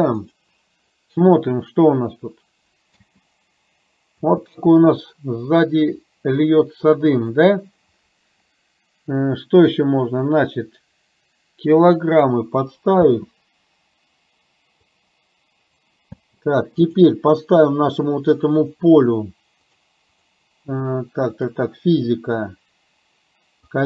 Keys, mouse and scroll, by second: 3.0 space, 4.3 space, 10.4 click, 13.2 space, 14.9 click, 16.2 space, 16.9 click, 20.1 click, 23.6 click.